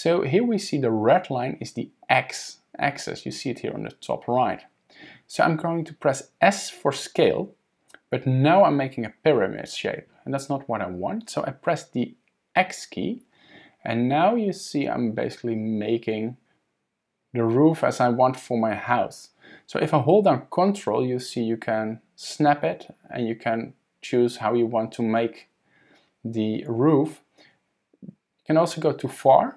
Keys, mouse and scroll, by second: 7.0 s.